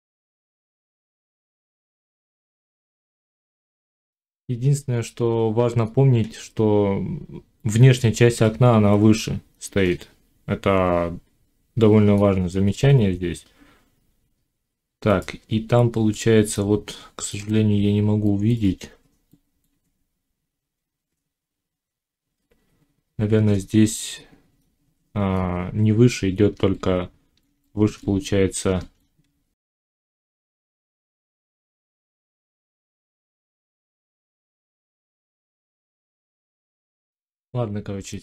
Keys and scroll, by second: 3.6 F9, 29.1 Tab, 31.8 ctrl+z, 33.1 alt+s, 35.8 ctrl+z, 36.7 F9.